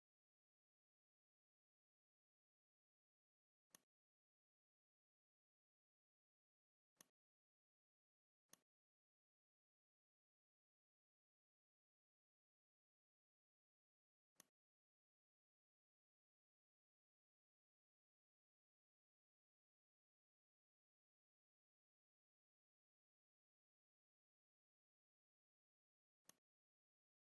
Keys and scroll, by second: 10.0 n.